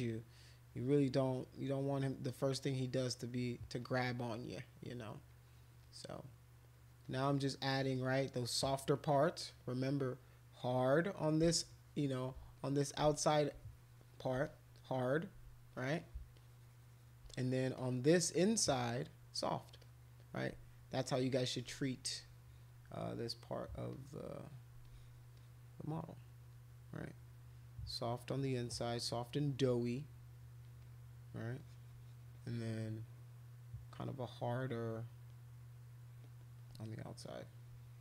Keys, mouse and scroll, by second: 0.3 click, 1.0 click, 1.1 click, 1.6 click, 2.3 click, 2.5 click, 2.7 click, 3.8-4.9 drag, 5.3 click, 5.8 click, 6.0 click, 6.2 click, 6.8 click, 7.0 click, 7.2 click, 7.4 click, 7.7 click, 7.9 click, 8.1 click, 8.5 click, 9.0 click, 9.1 click, 9.4 click, 10.5 click, 11.1 click, 11.2 click, 11.7 shift+click, 12.6 alt+click, 13.1 shift+click, 14.5 click, 15.7 click, 16.0 click, 16.3 shift+click, 17.3 click, 17.8 click, 19.8 click, 21.5 alt+click, 21.9 click, 23.9 click, 24.4 click, 24.8 alt+click, 25.4-26.4 drag, 27.2 click, 27.4 click, 27.8 click, 27.9 click, 28.0 click, 28.5 click, 28.8 click, 29.5 click, 30.2 click, 30.8 click, 31.6-33.5 drag, 34.1 click, 34.8 click, 35.4 click, 37.2 click, 37.4 click, 37.6 click.